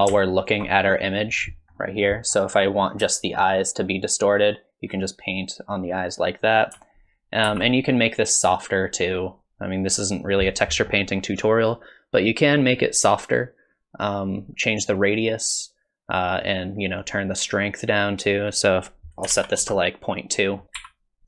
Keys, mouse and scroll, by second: 0.4 ctrl+shift+click, 1.1 middle click, 1.8 middle click, 2.3 scroll down 1, 2.6-3.0 scroll up 1, 3.1 shift+middle click, 3.5-4.3 scroll up 1, 4.5 click, 7.5 ctrl+z, 8.6 click, 9.9-10.5 scroll down 1, 10.5-11.6 scroll down 3, 15.2 click, 17.0 click, 18.6 click, 20.8 f.